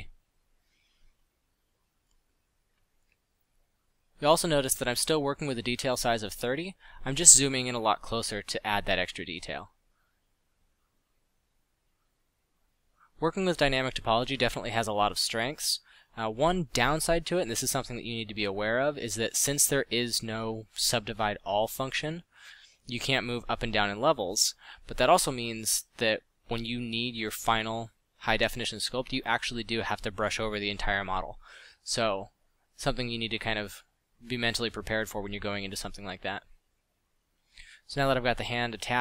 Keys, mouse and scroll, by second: 0.6 f, 8.6 f, 11.6 f, 19.7 f, 20.5 f, 22.1 f, 24.0 f, 25.6 f.